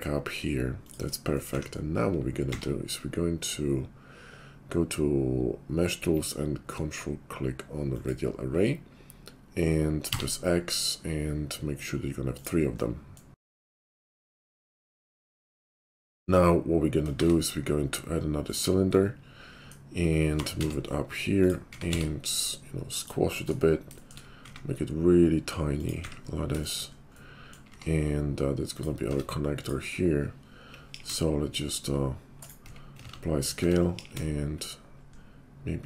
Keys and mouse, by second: 1.5 `, 2.3 q, 6.2-8.6 ctrl+drag, 8.6-10.9 middle drag, 13.0 middle click, 13.4 click, 13.5-15.5 middle drag, 15.5 shift+click, 15.8-29.6 middle drag, 17.2 shift+a, 20.3 g, 21.7 s, 24.4 s, 26.0 `, 27.7 q, 29.1 Tab, 29.6-30.7 drag, 30.7 middle click, 30.8 ctrl+b, 30.8 ctrl+click, 31.0 middle click, 31.1-32.1 shift+drag, 32.1 shift+middle click, 32.6 Tab, 33.0 ctrl+a, 33.6 Tab, 33.9 ctrl+b.